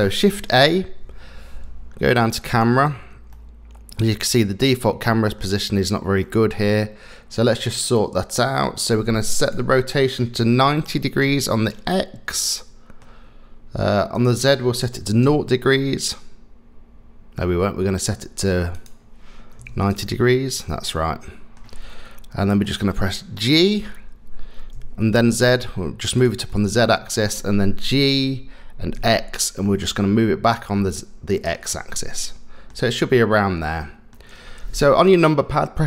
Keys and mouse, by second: 0.8 shift+a, 3.3-4.3 middle drag, 4.7-5.4 middle drag, 6.2 middle click, 9.5-11.3 drag, 12.3 middle click, 14.1-15.3 drag, 16.1-17.4 middle drag, 18.9-19.9 drag, 20.9 middle click, 22.7 middle click, 23.3 middle click, 23.9 g, 26.5 middle click, 27.9 g, 31.7-32.7 middle drag, 33.3 middle click.